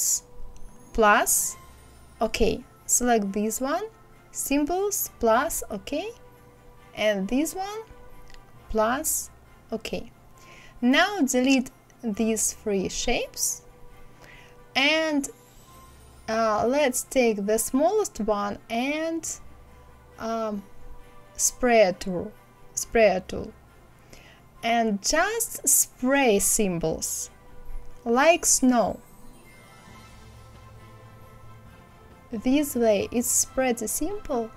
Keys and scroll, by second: 12.8 Delete.